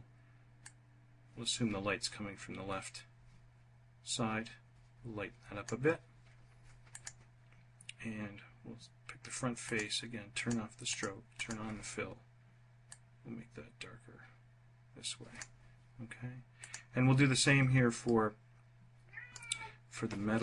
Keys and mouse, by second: 0.4-5.5 drag, 6.6 click, 9.4 click, 10.0 click, 10.6 click, 11.1 click, 17.8-19.1 drag.